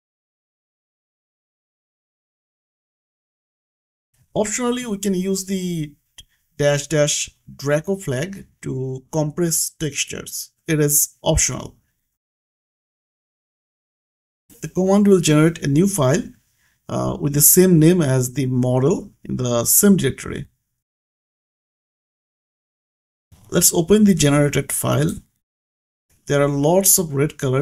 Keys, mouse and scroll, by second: 0.4 click, 0.8 scroll down 1, 1.2-3.0 typing, 5.4 Right, 7.7 click, 8.5 scroll down 1, 9.0-9.7 scroll up 1, 9.7 click, 13.9 click, 14.2 scroll down 1, 14.5 Return, 18.4 scroll down 1, 24.3 click, 27.0 click.